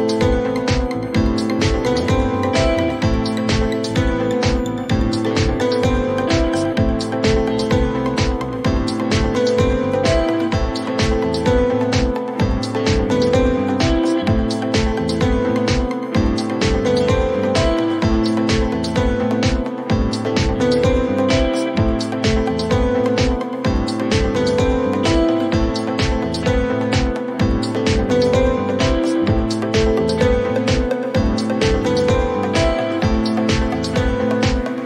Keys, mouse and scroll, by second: 0.0-0.3 typing, 1.5-3.3 drag, 4.4-6.4 drag, 5.0-5.5 typing, 8.0 click, 9.5 click, 10.0 r, 12.3 click, 12.5-13.5 typing, 13.1-15.7 drag, 20.3 click, 23.2 click, 24.7-27.6 typing, 29.2 click, 29.3 click, 32.5 click, 33.1-34.4 typing.